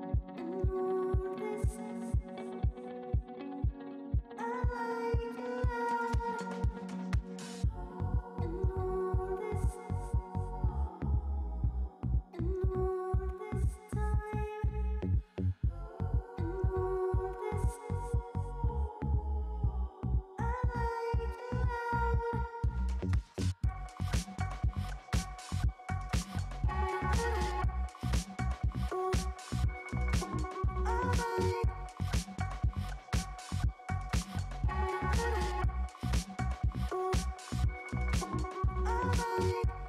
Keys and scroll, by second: 2.0 space, 2.7 ], 17.7 Escape, 18.2-21.9 typing, 20.2 ctrl+alt+z, 23.5 ], 25.4 space, 25.5 ctrl+alt+z, 35.3 ], 35.7 [, 36.7 ], 37.2 ], 38.7 [.